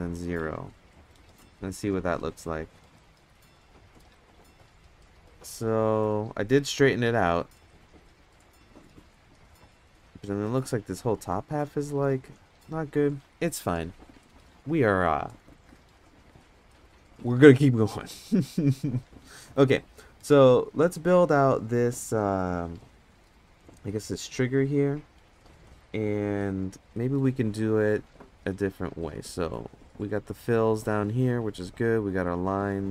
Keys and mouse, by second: 1.9 Tab, 18.1 middle drag, 19.2-19.5 middle drag, 19.9 middle drag, 26.9 middle drag, 29.0 click, 30.2 click, 30.5 click, 30.7 click, 30.9 click, 31.6 click, 32.3 click, 32.5 click.